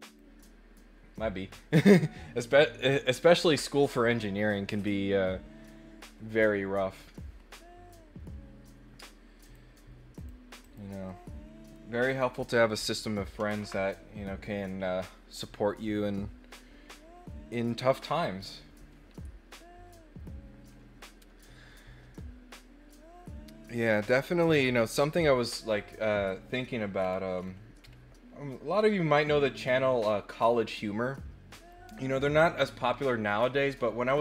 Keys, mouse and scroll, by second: 9.4 click, 10.1 click, 10.6 click, 11.0 middle click, 12.0 click, 27.0 scroll down 2, 27.3-27.8 scroll up 4, 28.8 scroll up 2.